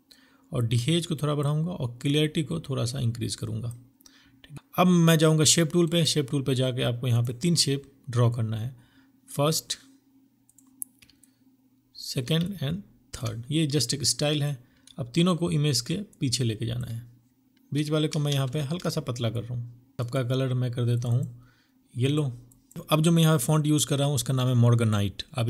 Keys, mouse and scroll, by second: 4.7 right click, 10.1 alt+l, 14.0 ctrl+click, 16.8 right click, 17.5 ctrl+z, 19.6 Return, 19.9 right click, 20.0 double click.